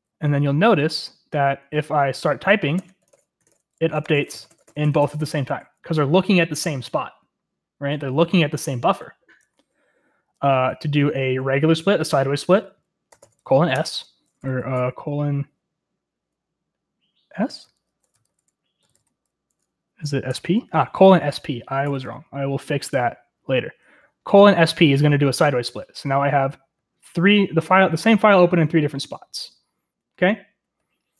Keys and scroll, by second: 0.0-5.7 typing, 8.2 ctrl+w, 9.4 Escape, 12.9-14.7 typing, 13.7 Return, 18.2-19.3 typing, 20.2 Return, 21.8 ctrl+l, 23.6 j, 25.2-31.1 typing.